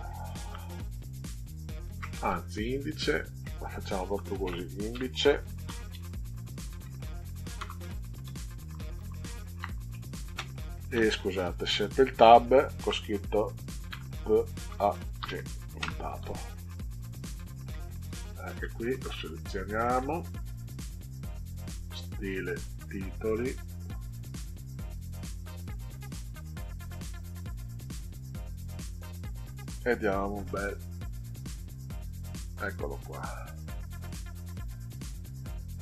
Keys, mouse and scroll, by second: 0.5 shift+g, 2.5-6.3 typing, 7.6 Return, 8.2 Up, 8.6 Right, 9.0 Right, 9.1 Right, 9.5 Right, 10.2 space, 11.2 BackSpace, 11.6 Tab, 13.8 p, 14.6 a, 15.2 g, 15.8 ., 18.0 shift+Left, 18.6 shift+Left, 18.8 shift+Left, 21.3 click, 21.9 click, 23.9 click, 26.9 click, 28.1 Delete, 30.7 Tab, 33.7-34.8 drag, 35.7 click.